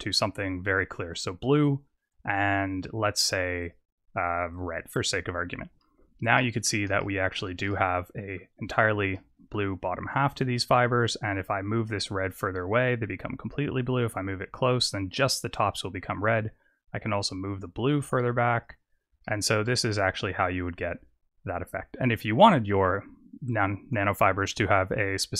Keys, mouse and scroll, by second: 3.0 click, 4.3 click, 6.3 middle click, 6.9 shift+middle click, 7.6 middle click, 8.6-9.0 scroll up 4, 9.0 middle click, 9.7 scroll up 1, 11.1 click, 15.8 click, 19.2 shift+middle click, 20.8-21.7 scroll up 5, 21.7-22.2 scroll up 3, 22.6 click.